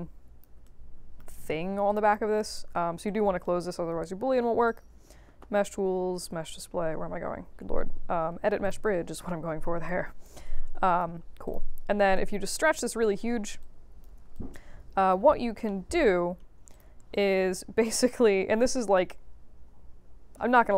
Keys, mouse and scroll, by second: 0.6 right click, 1.8 click, 2.0 click, 2.3 alt+click, 3.0-3.7 ctrl+drag, 4.6 click, 8.6 click, 9.8-10.2 alt+drag, 10.4 right click, 11.4 click, 12.1-12.8 drag, 13.6 click, 14.3 alt+click, 15.6 alt+middle click, 16.2-16.7 scroll up 2, 16.7 click, 17.1 click.